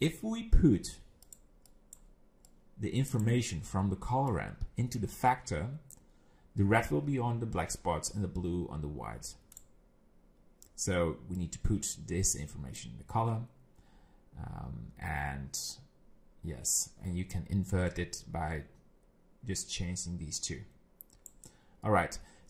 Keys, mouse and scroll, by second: 1.2 click, 1.7 click, 2.5 click, 4.3 click, 11.4 click, 17.9 click.